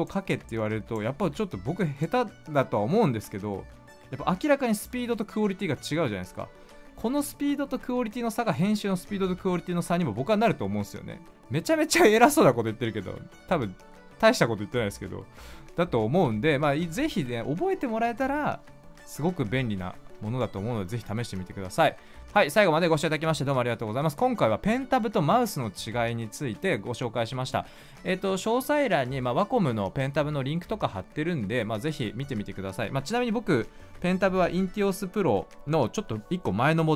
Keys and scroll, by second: 1.1 ctrl+z, 16.1 ctrl+z, 16.6 ctrl+z.